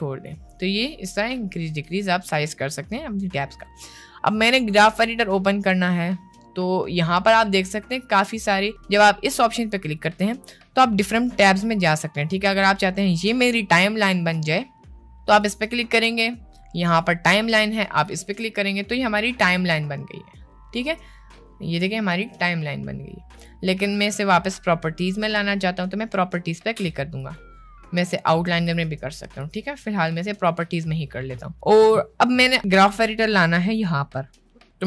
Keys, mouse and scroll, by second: 2.2 click, 3.0 middle click, 7.4-8.7 drag, 10.0-12.6 drag, 15.4-18.3 drag, 19.2-20.2 middle drag, 25.4-28.9 drag, 30.4 click.